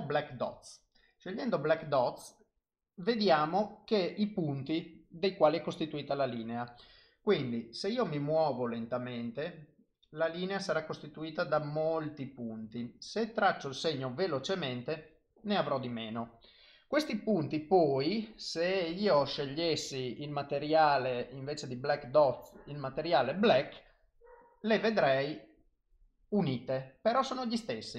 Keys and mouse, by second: 1.3 click, 8.0 click, 13.6 click, 14.9 click, 24.4 click, 26.4 click.